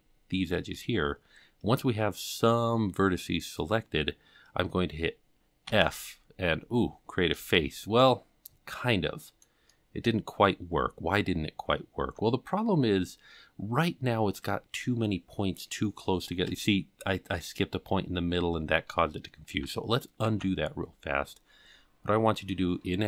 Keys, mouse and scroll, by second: 1.6-3.1 scroll up 1, 5.6 f, 6.8-7.3 scroll up 3, 7.5 shift+middle click, 8.7 middle click, 9.6 scroll up 1, 9.7 middle click, 12.8-15.7 scroll up 5, 18.3-18.8 scroll down 5, 20.2 ctrl+z, 20.8-21.5 scroll down 4, 21.5-22.6 scroll down 1.